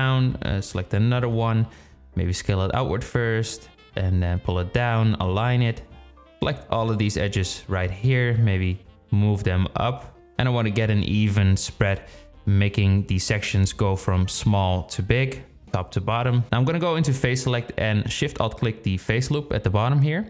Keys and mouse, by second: 0.2 click, 1.0 alt+shift+click, 1.5 s, 2.4 g, 3.6 s, 5.4 shift+click, 6.1 click, 7.1 click, 7.7 g, 8.6 drag, 8.9 g, 10.3 drag, 10.6 g, 11.3 s, 12.9 click, 13.1 g, 16.0 click, 19.4 s.